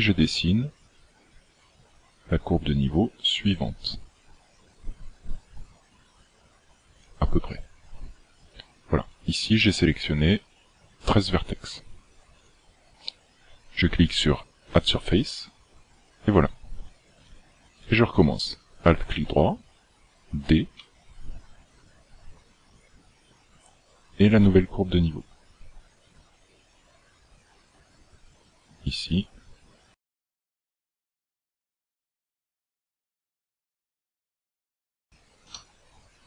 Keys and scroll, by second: 7.1-7.4 d, 20.8 d, 35.5 d.